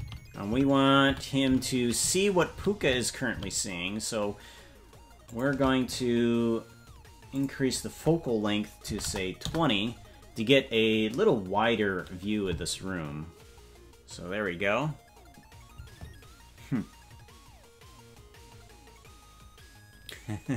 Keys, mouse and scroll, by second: 7.3-10.8 drag.